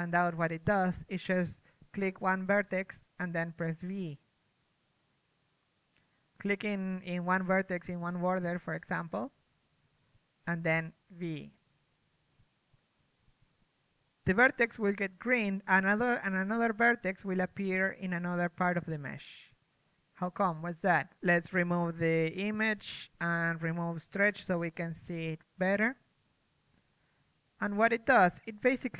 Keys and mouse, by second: 2.3 ctrl+Tab, 3.5 a, 4.1 z, 7.1 middle click, 11.5 z, 12.1-14.0 right drag, 14.6 v, 15.5-19.9 middle drag, 17.8 v, 20.6-24.1 right drag, 25.2 a.